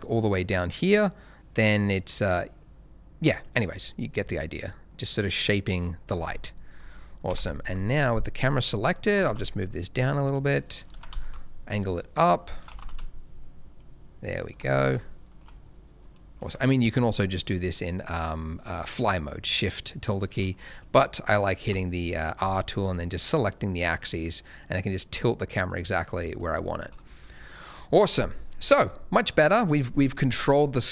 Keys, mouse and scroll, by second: 6.0 click, 6.3 scroll down 1, 6.7-7.2 scroll up 1, 7.2 Tab, 7.6 KP_0, 8.7 click, 9.1 g, 9.2 z, 10.6 click, 10.9 r, 11.1 x, 12.4 shift+click, 12.7 g, 12.7 z, 14.4 shift+click, 14.6 scroll up 1, 15.0 shift+middle click, 16.0-16.5 scroll down 1, 16.8 shift+`, 20.2 right click, 21.6 r, 22.4 x, 25.6 right click, 26.0-26.5 scroll up 1, 26.6 shift+middle click, 27.0 middle click, 27.0 shift+scroll down 1, 28.7 middle click.